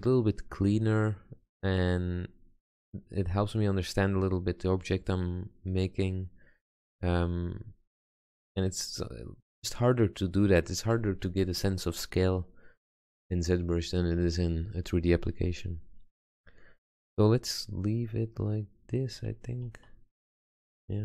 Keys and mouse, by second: 1.7 click, 6.1 click, 8.0 click, 8.4 click, 9.1 click, 10.2 click, 16.3-18.8 middle drag, 19.8 Tab.